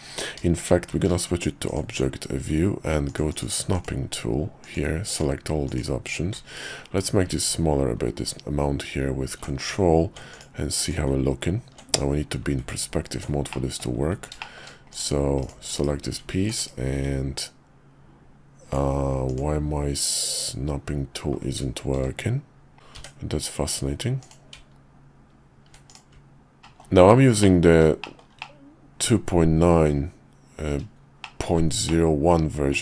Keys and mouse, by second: 0.9 shift+v, 3.1 click, 3.3 click, 4.6 click, 5.1-9.7 drag, 10.3 click, 10.8 click, 12.0 KP_5, 13.5 middle click, 14.4 shift+middle click, 14.9 click, 15.4 click, 15.7 /, 16.5 /, 19.2-20.8 drag, 21.9 shift+v, 22.9 d, 25.9 click, 26.6 shift+middle click, 27.4 middle click, 28.0 shift+middle click, 28.4-30.6 middle drag, 31.2 shift+middle click, 31.8 middle click.